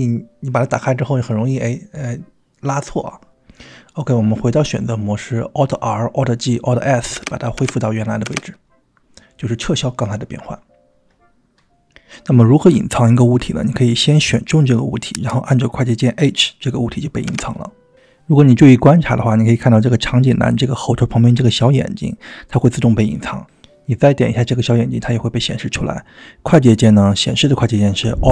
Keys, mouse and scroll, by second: 0.9 click, 2.4 click, 4.0 click, 5.4 click, 6.2 click, 7.2 alt+g, 7.6 alt+r, 9.1 click, 15.2 click, 17.3 h, 22.5 alt+h, 24.1 click, 24.8 click.